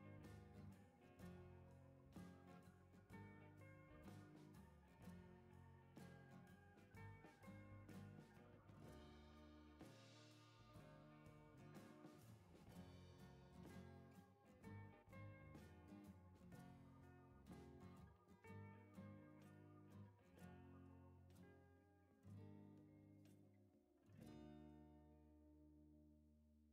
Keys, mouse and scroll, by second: 0.6 click, 2.6 click, 4.2 click, 5.3 click, 5.8 right click, 7.1 click, 7.4 right click, 10.8 click, 12.5 click, 15.0 click, 17.6 click, 18.9 click, 19.9 scroll down 1, 20.2 click, 20.8 right click, 21.2 click, 22.1 right click, 23.6 click, 24.5 right click.